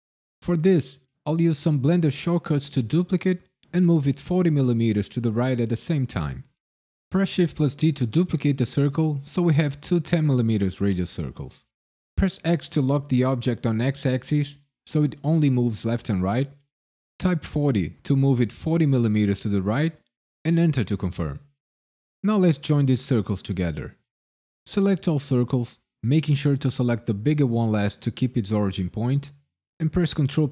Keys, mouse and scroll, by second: 7.1 shift+d, 12.1 x, 17.5 KP_4, 17.9 KP_0, 20.4 KP_Enter, 23.5 shift+click, 24.6 shift+click, 30.1 ctrl+j.